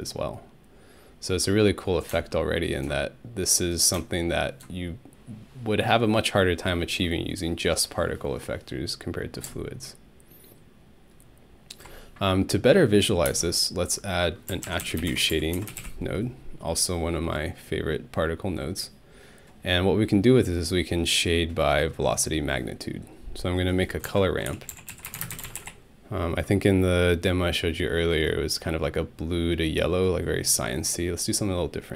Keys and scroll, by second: 13.3-16.3 typing, 23.8-26.0 typing.